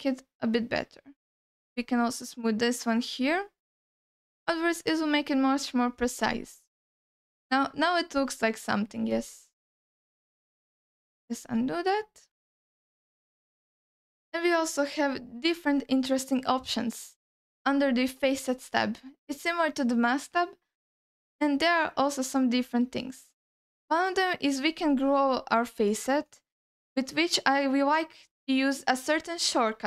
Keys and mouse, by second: 1.7-3.9 shift+drag, 4.3-6.2 shift+drag, 6.6-7.7 alt+middle drag, 8.2 shift+click, 9.4 alt+middle click, 10.4 ctrl+z, 11.4 ctrl+alt+middle click, 12.0-13.3 alt+middle drag, 13.7 alt+shift+middle click, 14.4 ctrl+alt+middle click, 15.1 alt+middle click, 18.4-24.7 drag.